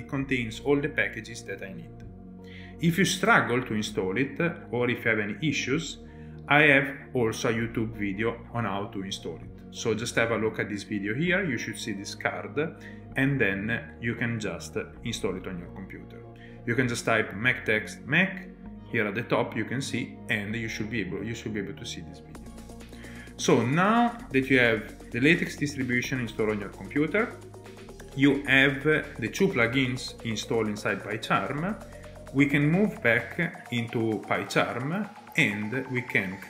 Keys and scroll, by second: 3.4 ctrl+Tab, 5.1 ctrl+Tab, 33.8 alt+Tab.